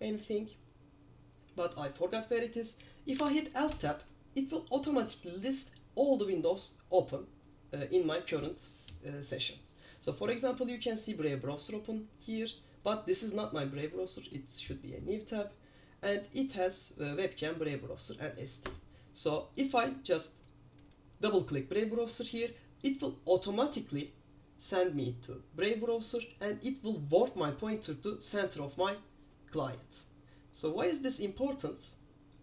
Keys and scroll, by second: 3.3 alt+Tab.